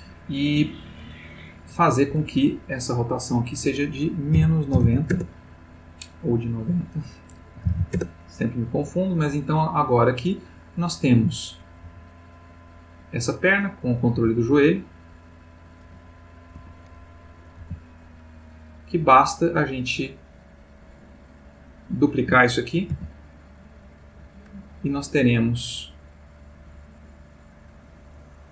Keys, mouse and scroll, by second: 1.8 click, 3.3 click, 4.3 -, 4.7 9, 5.1 Return, 6.8 click, 7.6 9, 7.9 Return, 11.3 click, 11.8 g, 13.2 click, 13.9 click, 14.1 g, 16.6 Escape, 17.4 click, 17.6 g, 20.7 click, 21.4 click, 22.9 shift+d, 24.2 click, 26.6 click.